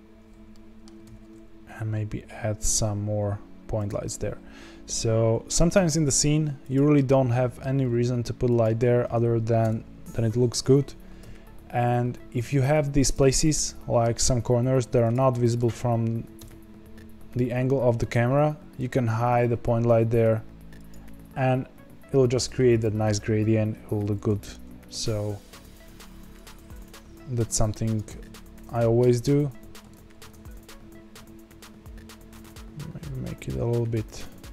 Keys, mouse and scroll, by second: 0.5 middle click, 1.0 alt+d, 4.0-5.7 middle drag, 5.7 g, 6.9 middle click, 7.8 g, 9.6 KP_0, 11.1 g, 13.3 middle click, 14.1 g, 15.3-16.3 middle drag, 16.3 KP_0, 18.7 g, 24.5-28.2 drag, 28.2 ctrl+z, 29.9 ctrl+z, 30.5-34.5 drag.